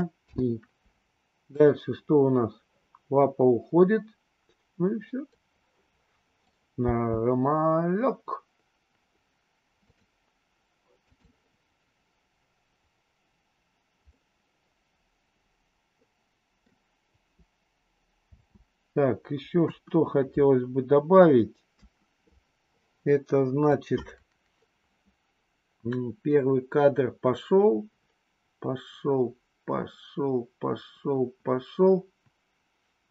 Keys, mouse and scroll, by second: 0.2 i, 1.6-6.5 drag, 6.8 space, 9.8-11.2 drag, 14.1-16.7 middle drag, 18.3 space, 19.5 KP_2, 21.7 KP_1, 23.6-33.1 drag.